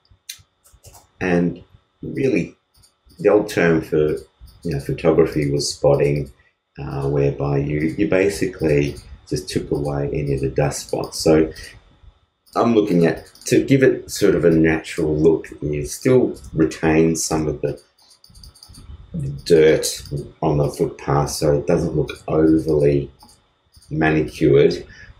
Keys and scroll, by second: 16.8 alt+space.